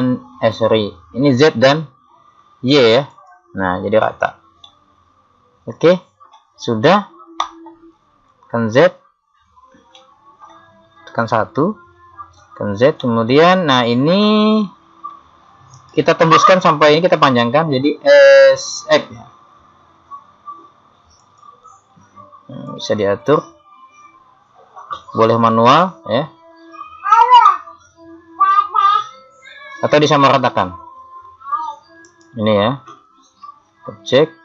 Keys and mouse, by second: 0.0 middle click, 3.1 click, 4.8-6.7 middle drag, 8.3 z, 11.2 KP_1, 12.5 z, 14.7 KP_1, 15.8-17.5 right drag, 19.0 s, 22.7 click, 32.1-33.8 right drag, 33.8 middle click.